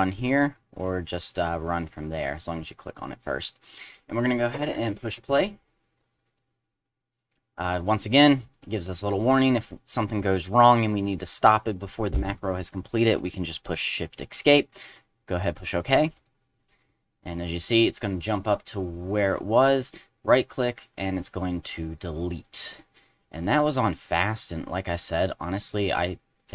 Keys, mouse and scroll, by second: 0.3 click, 1.8 click, 6.2 click, 16.1 click.